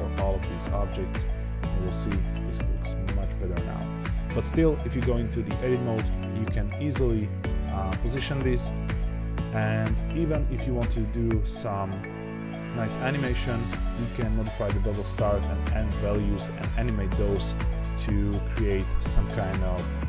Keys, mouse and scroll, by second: 0.1 click, 0.4 ctrl+2, 0.8 click, 1.1-2.7 middle drag, 2.7-3.2 scroll down 2, 3.2-4.3 middle drag, 4.3-4.6 scroll up 1, 4.6 click, 4.9 Tab, 6.1 g, 8.5 middle click, 8.8 Tab, 9.3-12.6 scroll up 2, 15.9-18.9 drag, 19.2 click.